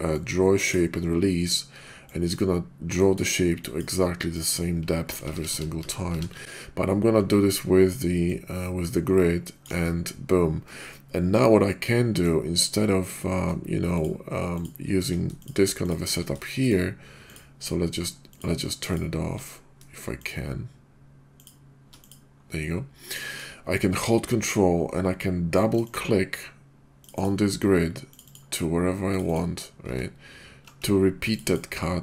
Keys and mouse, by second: 0.1-0.7 drag, 1.9-2.3 drag, 3.0 drag, 3.6 drag, 4.3 drag, 5.2 ctrl+z, 5.3 ctrl+z, 5.5 ctrl+z, 5.8 ctrl+z, 6.1 ctrl+z, 8.2-9.7 ctrl+drag, 10.7-12.2 middle drag, 13.9 shift+click, 15.3 shift+click, 16.5 shift+click, 17.2 shift+click, 18.2 shift+click, 20.2-22.5 shift+drag, 23.3 middle click, 25.7 ctrl+click, 25.9 ctrl+click, 27.0 ctrl+click, 27.2 ctrl+click, 28.1 ctrl+click, 28.3-29.2 ctrl+drag, 29.9 ctrl+z, 31.3 ctrl+click, 31.5-32.0 ctrl+drag.